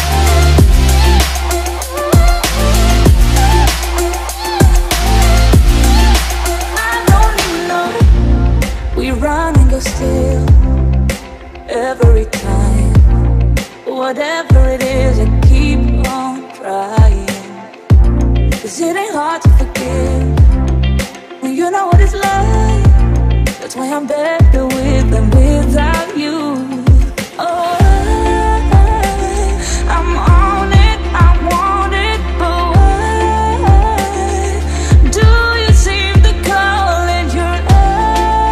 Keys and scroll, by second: 14.6 space.